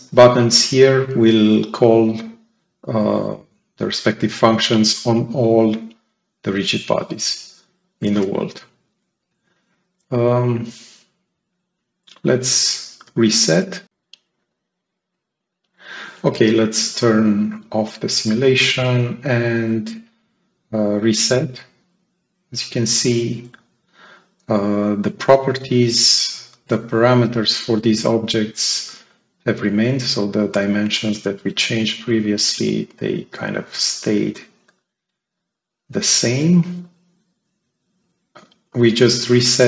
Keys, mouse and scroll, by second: 12.5 ctrl+click, 13.5-13.8 scroll up 2, 17.3 click, 20.4 click, 21.5-22.9 right drag, 21.5-22.8 drag, 23.1-23.5 scroll down 2, 23.5-24.7 right drag, 24.3-24.7 drag, 30.5 right click, 32.1 click, 33.8-34.9 drag, 35.4-37.9 drag, 38.6-39.6 drag.